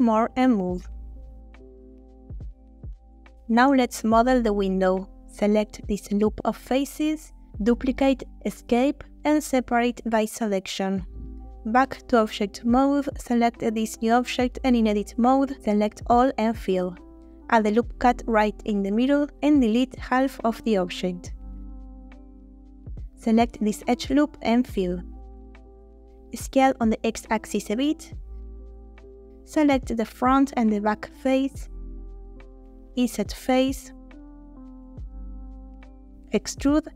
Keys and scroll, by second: 0.3 s, 0.5 x, 1.0 shift+x, 2.0 g, 2.2 x, 5.5 3, 7.6 shift+d, 8.5 Escape, 9.0 F3, 10.1 s, 10.3 e, 11.0 p, 11.8 Tab, 14.4 Tab, 14.9 a, 16.1 f, 17.0 ctrl+r, 17.8 Escape, 19.5 3, 21.1 Delete, 23.1 2, 25.3 ctrl+f, 26.4 a, 27.3 x, 29.1 3, 36.7 e.